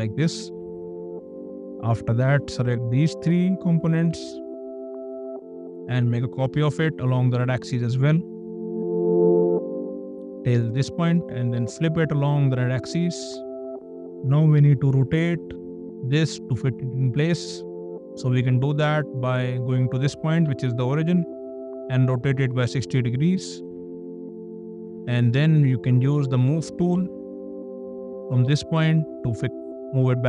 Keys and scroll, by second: 0.5 space, 5.5 m, 11.3 space, 20.4 q, 22.7 KP_6, 23.3 KP_0, 26.9 m.